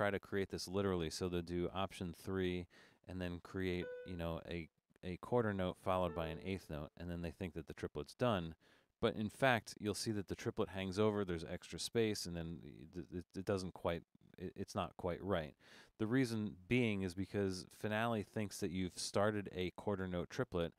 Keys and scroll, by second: 2.1 alt+3, 5.7 Down, 6.1 4.